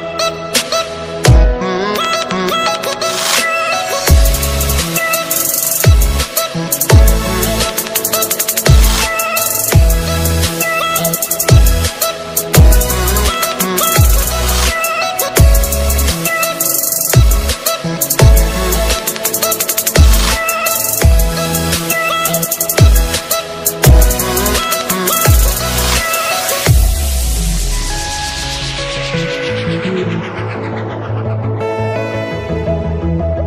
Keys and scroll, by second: 33.2 alt+space.